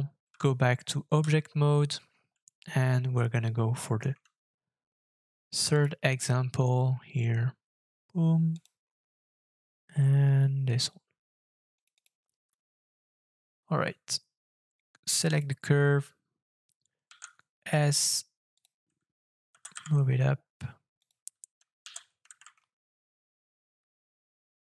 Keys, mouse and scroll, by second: 0.2 middle click, 0.2-1.2 Tab, 1.7 scroll down 3, 2.2-2.6 scroll down 8, 3.3 shift+middle click, 11.9 double click, 12.9-15.0 scroll down 3, 17.0 s, 19.5 g, 19.7 z, 21.8 g, 22.3 shift+z, 24.4 middle click.